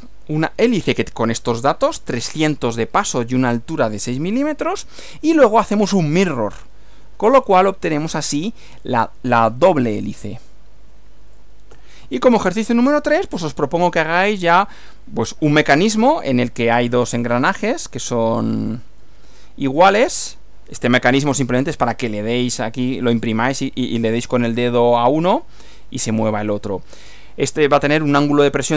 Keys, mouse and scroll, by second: 5.2 Right, 11.7 Right, 19.0 Right.